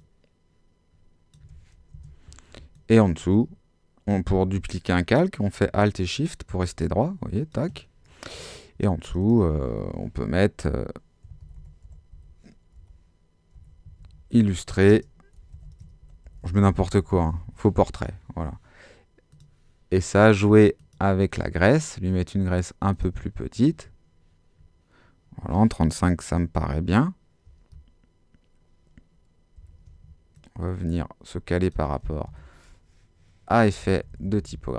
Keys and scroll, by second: 4.4 alt+shift+super+z, 5.2 shift+super+z, 11.2-13.9 typing, 14.9-18.2 typing, 29.6 super+t, 32.3 shift+Page_Up, 33.6 Down.